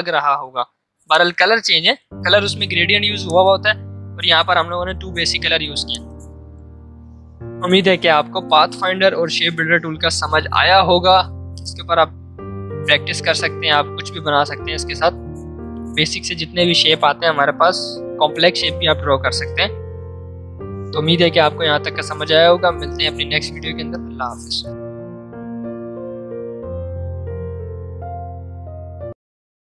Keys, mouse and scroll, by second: 2.8 v, 3.2-8.7 drag.